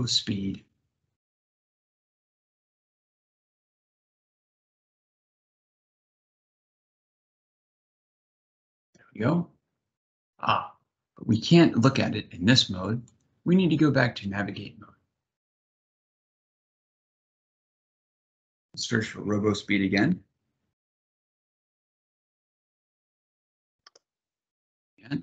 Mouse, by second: 12.8 click.